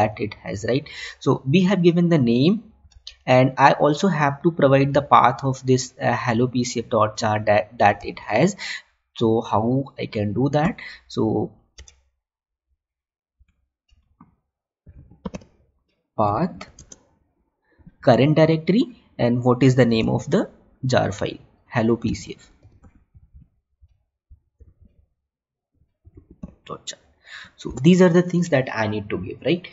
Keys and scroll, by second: 3.5 Tab, 8.6 Tab, 11.6 Tab, 16.7 space, 20.6 Tab, 22.6 Tab, 27.7 ctrl+s.